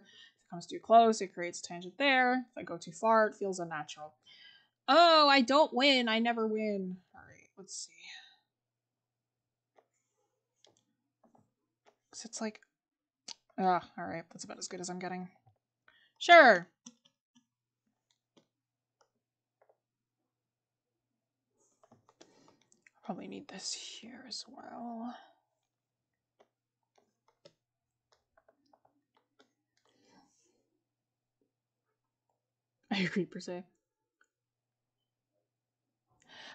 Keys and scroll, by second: 15.2 scroll down 1, 19.7 scroll down 1, 21.9 scroll up 1, 22.0 scroll, 27.3 scroll.